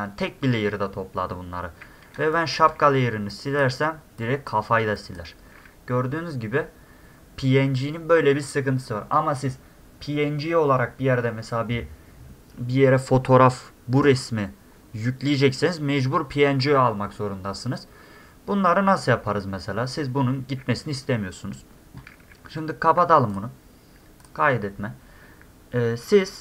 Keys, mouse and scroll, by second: 1.5 middle click, 1.6 middle click, 2.2 space, 2.3 click, 2.7 d, 2.8 middle click, 2.8 scroll up 2, 3.3 click, 4.2 click, 5.0 click, 6.2-7.0 scroll down 2, 18.1 scroll down 2, 20.6 middle click, 20.7 middle click, 23.3 click, 24.2 click.